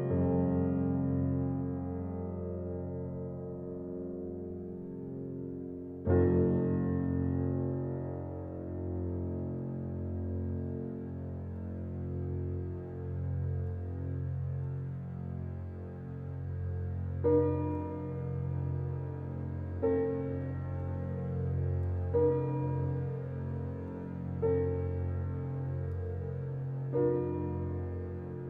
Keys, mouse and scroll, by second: 0.4 ctrl+y, 1.0-1.8 scroll down 2, 1.5 click, 1.8 click, 1.8-3.2 scroll up 1, 4.0-4.7 scroll down 1, 5.0-6.2 scroll down 1, 6.2 scroll up 1, 10.1-10.9 scroll down 1, 11.1 ctrl+s, 13.7-14.1 scroll down 1, 14.6 scroll up 1, 14.8 ctrl+s, 15.5 scroll up 1, 17.5-18.1 scroll down 2, 18.0 scroll up 1, 18.6-19.1 scroll down 1, 19.1 scroll down 1, 21.4-21.8 scroll up 1, 22.4 click, 27.7-28.2 scroll down 1, 28.2 scroll up 1.